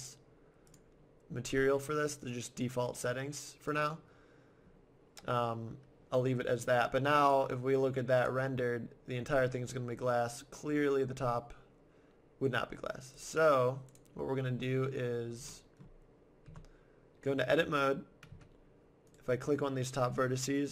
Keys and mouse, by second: 3.0-4.8 drag, 7.2-8.8 drag, 8.8 middle click, 13.2-14.6 drag, 14.9-16.5 middle drag, 16.5 Tab, 18.3 z, 19.1-20.7 right drag.